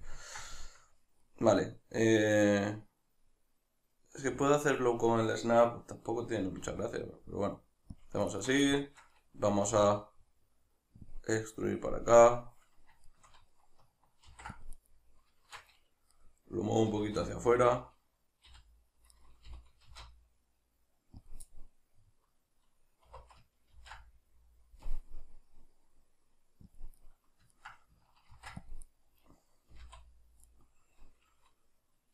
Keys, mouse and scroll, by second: 0.0 click, 0.2 ctrl+middle click, 8.0 click, 8.3 shift+right drag, 8.7-11.1 shift+middle drag, 9.7 e, 11.1 click, 13.1-14.9 shift+middle drag, 14.3 ctrl+r, 14.9 right click, 15.4 shift+Tab, 16.1-19.2 middle drag, 16.9 g, 19.2 right click, 19.5 g, 21.3 click, 21.4-26.8 middle drag, 23.1 2, 23.8 ctrl+b, 26.8 click, 27.0-29.0 middle drag, 28.3 ctrl+r, 29.0 right click, 29.7 s, 30.6 right click.